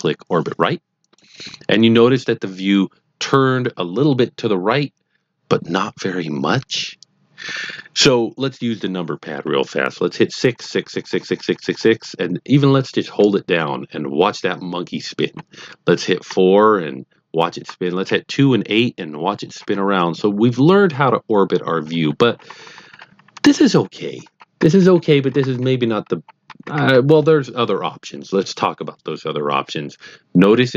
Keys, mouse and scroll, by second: 1.0 click, 10.5-11.9 typing, 13.1-15.2 typing, 16.2-26.7 typing.